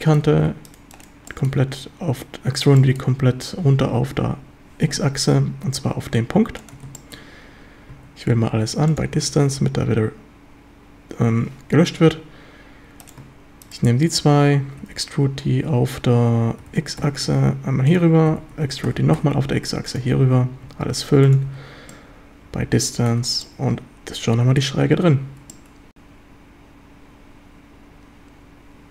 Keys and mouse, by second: 0.0 shift+middle drag, 1.3 shift+middle drag, 2.8 shift+middle drag, 4.9 z, 6.6 ctrl+click, 7.0 shift+middle drag, 8.3 a, 8.6 q, 9.2 a, 15.7 Escape, 16.7 g, 17.0 x, 17.9 ctrl+click, 18.3 e, 18.6 Escape, 18.9 g, 19.2 x, 19.9 ctrl+click, 20.2 a, 20.7 a, 21.0 q, 21.5 a, 22.0-23.1 drag, 23.2 Tab, 23.5-24.6 drag, 25.5-28.9 middle drag.